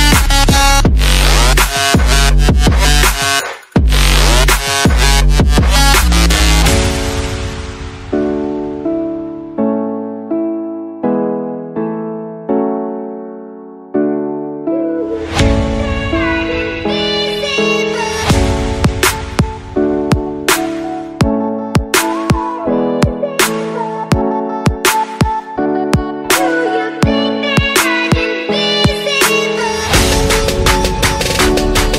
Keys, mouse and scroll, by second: 1.5 click, 2.5 click, 3.3 click, 4.1 click, 4.9 click, 5.3 click, 6.9 click, 7.7 click, 10.1 click, 10.9 click, 13.9 click, 14.3 click, 14.6 F9, 18.9 click, 19.5 click, 21.4 click, 22.8 right click, 24.1 click, 24.7 click, 25.7 Delete, 26.5 click, 27.2 click, 27.8 middle click, 28.8 click, 29.0 middle click, 29.1 middle click, 29.6 click, 29.9 middle click, 31.1 click.